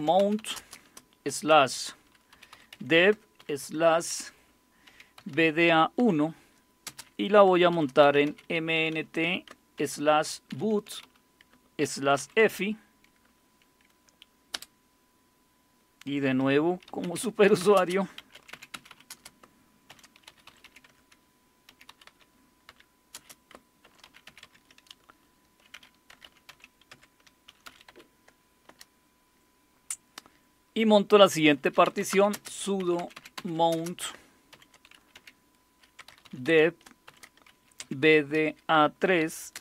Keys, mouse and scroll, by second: 0.0-3.4 typing, 4.9-12.5 typing, 14.3-15.0 typing, 16.6-24.3 typing, 25.7-28.7 typing, 31.7-39.5 typing.